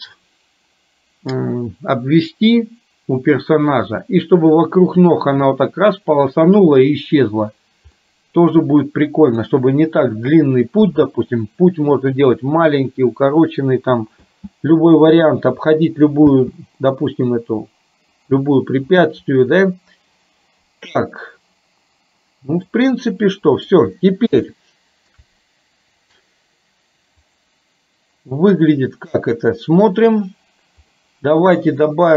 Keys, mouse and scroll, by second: 8.0-9.5 middle drag, 14.3 space, 16.4 space, 16.9-18.4 middle drag, 22.8-23.9 middle drag, 24.5 shift+middle click, 29.2 click, 31.0 middle click.